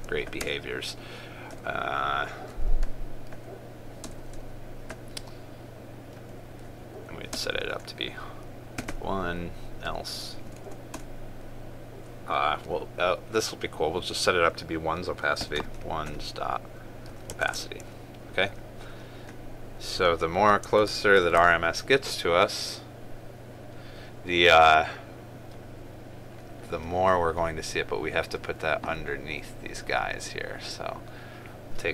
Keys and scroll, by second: 0.5 ctrl+space, 18.1 ctrl+space, 21.3 ctrl+s.